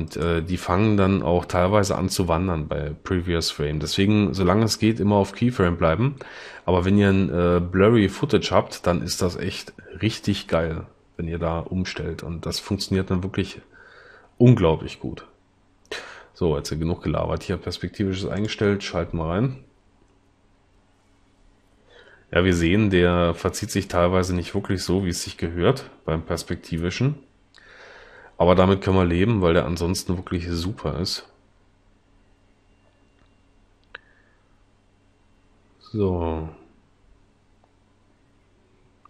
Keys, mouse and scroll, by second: 25.4 l.